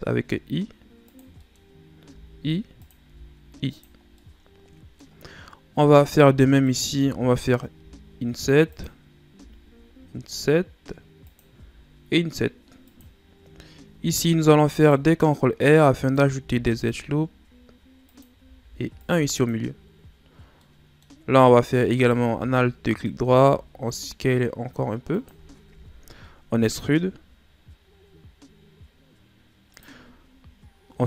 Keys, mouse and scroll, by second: 0.3 i, 1.4 middle click, 1.6 scroll up 2, 2.1 i, 3.1 i, 4.0 scroll down 2, 4.2-5.3 middle drag, 5.3-6.6 scroll up 1, 6.6 alt+right click, 7.8 i, 9.4 i, 11.5 i, 13.9 ctrl+r, 16.5 ctrl+r, 20.6-21.9 middle drag, 21.9 alt+right click, 23.4 s, 26.7 e, 30.4 scroll up 1.